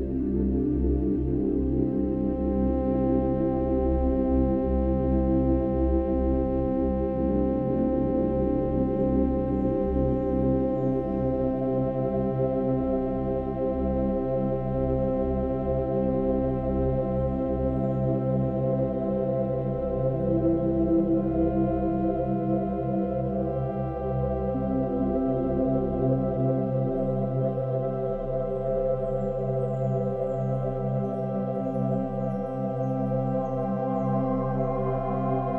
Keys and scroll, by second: 4.5 Right, 5.6 F2, 5.8 ctrl+t, 6.7 Left, 6.8 Right, 7.0 Left, 7.3 ctrl+-, 8.9 ctrl+=, 11.1 space, 18.4 ctrl+-, 18.6 ctrl+=, 19.0 ctrl+-, 19.1 ctrl+=.